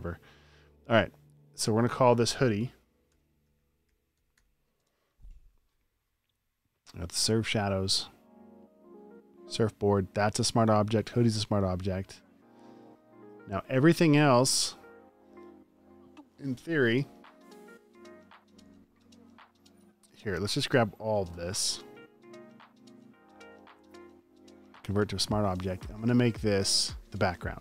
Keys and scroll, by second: 3.0-4.9 typing.